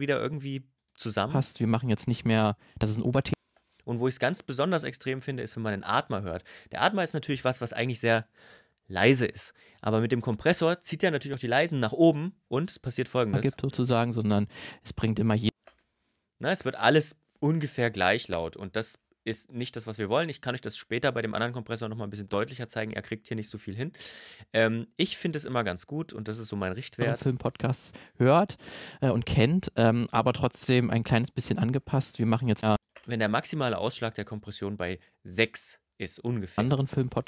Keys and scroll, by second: 1.0 space, 3.1 space, 13.1 space, 15.3 space, 26.8 space, 32.5 space, 36.4 space.